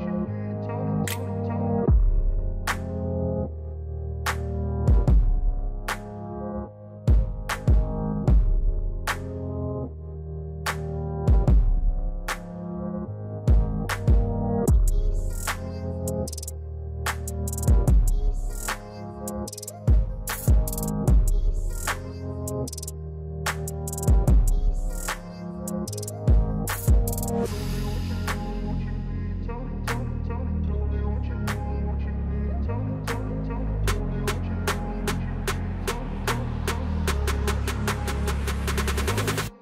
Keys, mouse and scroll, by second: 0.7-1.1 scroll down 2, 2.0-3.1 alt+scroll down 2, 3.1-5.1 alt+drag, 5.1 alt+scroll up 1, 6.1 ctrl+0, 7.2 click, 10.7 click, 11.6-12.0 scroll up 2, 13.4 click, 14.0 scroll, 14.1 alt+scroll down 1, 14.2 scroll, 14.3 click, 14.7 alt+scroll down 1, 15.8-17.5 drag, 17.5 space, 18.7-23.2 drag, 23.2 click, 25.4 alt+click, 26.2 alt+scroll up 1, 27.5 alt+scroll down 1, 28.5-31.5 drag, 31.7-33.6 drag, 33.6-37.5 drag, 37.5 scroll down 1, 38.5 click.